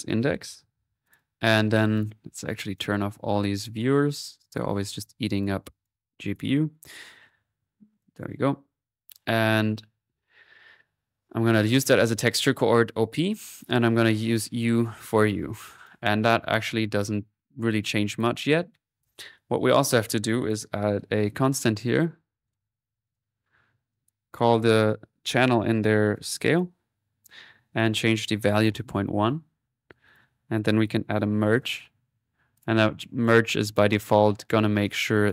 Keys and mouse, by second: 0.9-3.5 drag, 3.5 right click, 4.2-6.8 drag, 7.1-8.9 drag, 9.3-11.8 drag, 14.0 click, 15.8-17.4 drag, 16.1 typing, 17.7 click, 20.4 click, 22.1-22.9 typing, 23.1 click, 23.9 click, 27.6-29.8 alt+drag, 30.1 right click, 30.8 click, 31.3-32.1 typing, 32.6 click, 33.5-34.8 middle drag, 34.8 click.